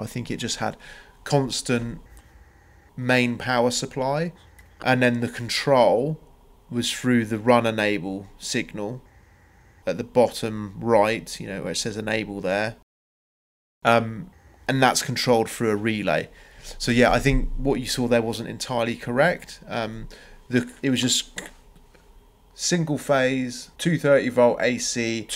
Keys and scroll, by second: 2.3 space, 2.8 Escape, 3.1 Escape, 3.4 Escape, 4.9 Escape, 5.2 space, 8.3 Escape, 10.4 c, 11.0 Return, 13.6 Escape.